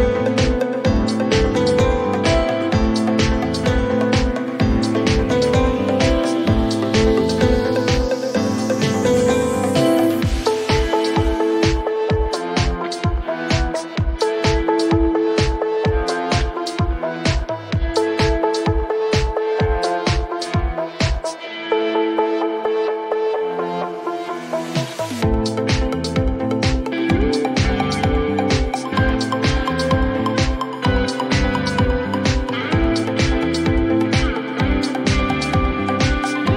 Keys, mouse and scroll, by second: 0.4 typing, 1.3 Return, 3.4 click, 3.7-4.4 typing, 4.5 Return, 6.4 click, 6.7-7.6 typing, 7.7 Return, 9.8 middle click, 9.9 middle click, 11.3 middle click, 13.4 middle click, 13.5 click, 14.4-15.4 typing, 15.5 Return, 17.1 scroll, 18.8-19.7 scroll, 20.5 scroll, 23.4 click, 24.9 click, 25.0 Delete, 29.9 click, 32.4-33.4 typing, 35.2 click, 35.2-36.2 typing.